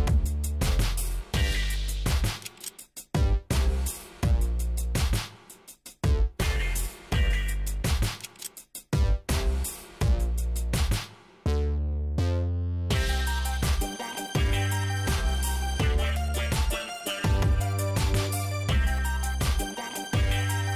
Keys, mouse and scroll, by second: 1.5 click, 3.8 click, 5.2 shift+right click, 6.6 shift+right click, 7.4 shift+right click, 8.8 click, 9.4 click, 9.8 middle click, 10.1-10.6 scroll up 4, 14.0 click, 17.7 click, 18.4 click.